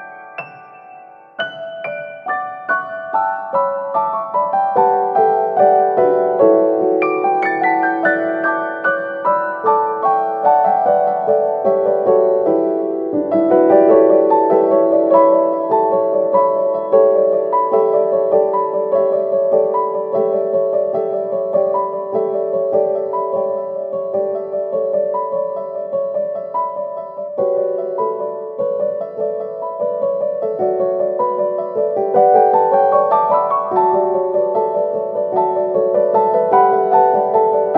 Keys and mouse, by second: 0.1 middle click, 0.9 middle click, 1.6 middle click, 2.4 alt+right click, 2.9 g, 4.7 middle click, 5.3 a, 5.8 shift+middle click, 6.1 KP_3, 6.7 shift+middle click, 7.4 alt+z, 7.7 b, 8.8 w, 10.0 middle click, 10.8 alt+z, 11.1 shift+middle click, 11.7 middle click, 13.2 a, 14.1 w, 15.2 KP_3, 15.8 shift+middle click, 16.8 alt+s, 19.3-23.8 middle drag, 24.8-28.4 middle drag, 28.7 middle click, 29.4 shift+middle click, 30.4 KP_1, 30.8 middle click, 31.6-32.0 middle drag, 32.6 right click, 32.9 g, 35.9 middle click, 36.5 KP_3.